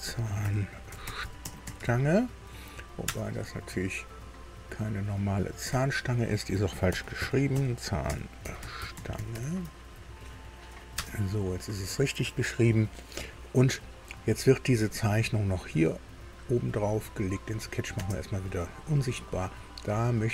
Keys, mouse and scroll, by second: 0.0-2.3 typing, 5.7 F2, 6.9-9.8 typing, 10.9 Return, 15.4 middle click, 17.5 click, 17.9 space, 19.3-20.3 drag.